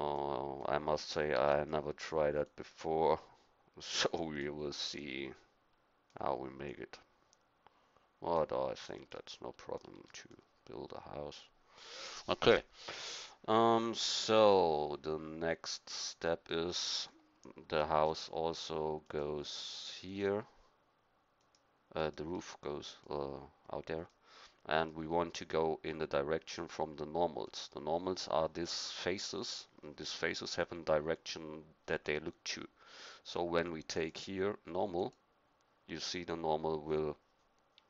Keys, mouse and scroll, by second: 1.3 e, 6.6-8.9 drag, 22.4 middle click, 33.9-37.8 drag.